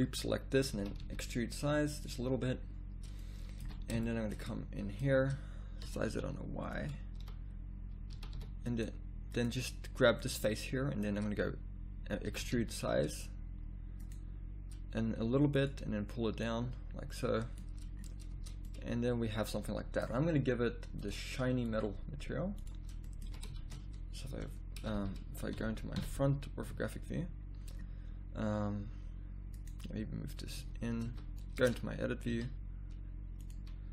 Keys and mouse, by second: 0.8 click, 0.8 e, 3.6 z, 5.1 click, 5.8 s, 7.2 z, 8.1 z, 8.3 s, 10.2-11.3 middle drag, 12.2 e, 15.2 s, 18.3 Tab, 18.8 middle click, 23.0 middle click, 23.3-26.7 typing, 30.6 z, 31.1 z, 31.6 Tab, 32.3 a, 33.4 click.